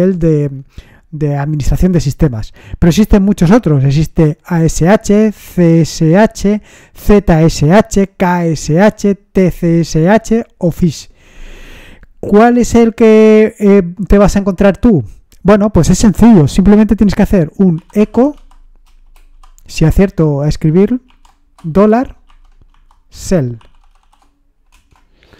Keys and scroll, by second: 17.5-24.5 typing, 24.7 Return.